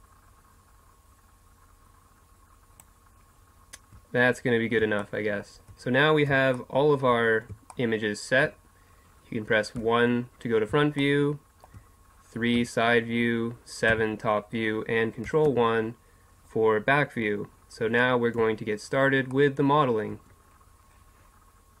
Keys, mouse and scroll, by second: 9.8 KP_1, 12.5 KP_3, 13.9 KP_7, 15.5 ctrl+KP_1, 19.3-21.8 middle drag.